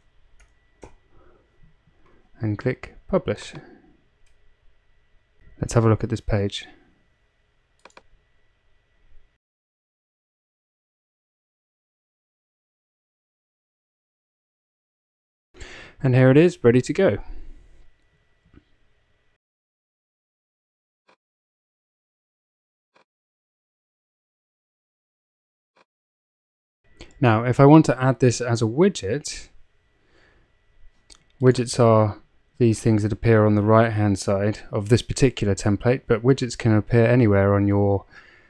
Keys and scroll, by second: 0.0-0.9 typing.